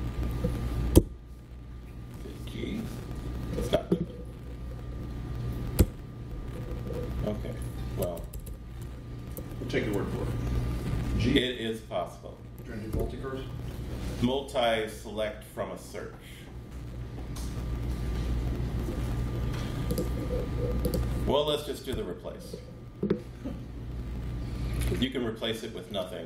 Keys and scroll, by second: 0.9 BackSpace, 2.6 ctrl+g, 5.8 BackSpace, 8.0-9.3 typing, 12.3-13.5 typing, 21.9 super+r.